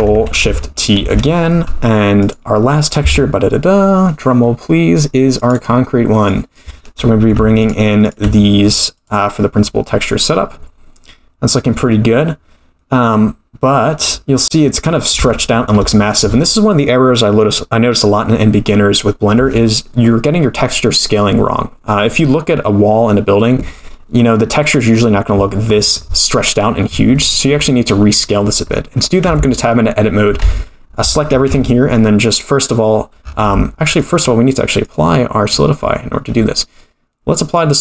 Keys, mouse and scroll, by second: 1.1 ctrl+shift+t, 11.6-12.4 scroll down 4, 14.5-15.2 scroll up 7, 15.3 shift+middle click, 24.2-25.7 scroll up 5, 25.7-27.2 scroll up 2, 27.2-28.5 scroll down 14, 29.2 Tab, 30.4 a, 31.5 u, 33.4 Tab, 33.4 click, 34.8 click, 37.4-37.8 drag.